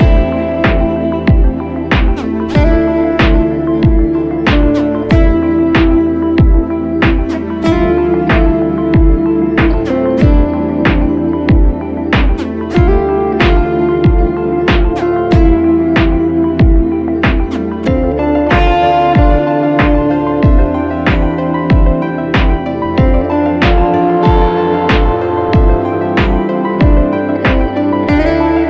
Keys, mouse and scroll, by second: 7.0-7.5 scroll up 1, 7.8 shift+click, 8.8 ctrl+t, 10.1 alt+shift+click, 13.5 Up, 13.7 Up, 13.9 Up, 14.1 Up, 14.6 Down, 15.0 Right, 15.4 Right, 15.6 Return, 16.1 click, 17.4 Left, 21.6 right click, 23.2 double click, 28.3-28.6 scroll up 1.